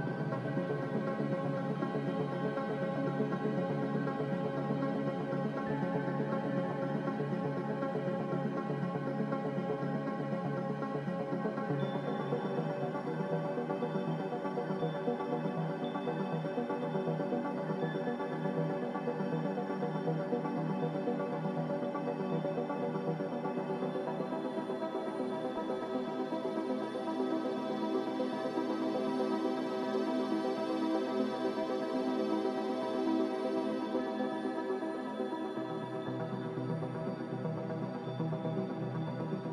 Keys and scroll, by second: 8.7 x, 32.1 q.